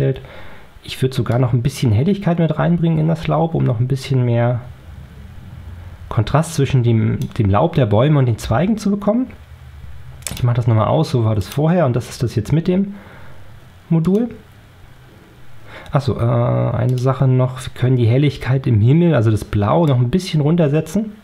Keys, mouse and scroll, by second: 1.2-7.3 drag, 10.2 click, 11.3 click, 14.0 click, 16.8 click, 19.8-21.2 drag.